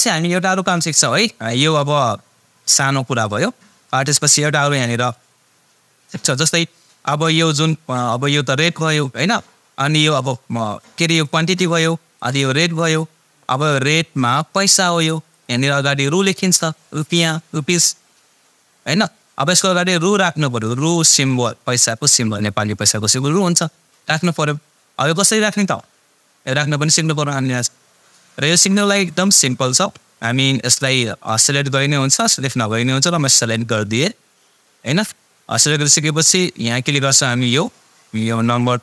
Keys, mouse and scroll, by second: 5.0-9.4 drag, 19.9-20.8 drag, 30.7-33.7 drag.